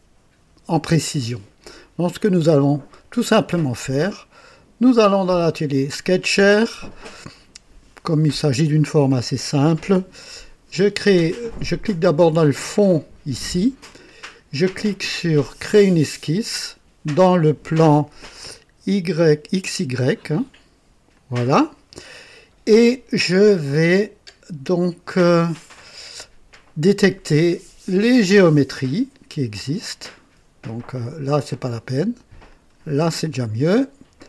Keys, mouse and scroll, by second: 4.2 click, 6.3 click, 13.2 click, 15.6 click, 21.0 click, 27.8 click, 29.5 click, 32.3 click.